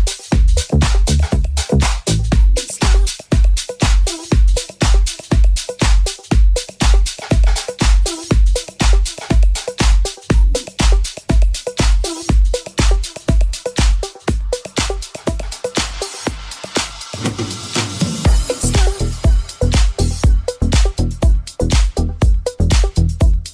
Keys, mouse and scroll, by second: 0.0 alt+right click, 0.1-5.1 alt+middle drag, 0.8 i, 5.1 Tab, 5.1-16.4 ctrl+drag, 6.0 w, 12.1 Tab, 13.8 middle click, 13.8 right click, 15.3 g, 16.4 alt+middle click, 16.7 right click, 16.7-19.7 middle drag, 19.7 alt+right click, 19.7-23.1 alt+middle drag, 21.6 g, 22.5 alt+z, 23.1 alt+click, 23.2-23.5 alt+middle drag.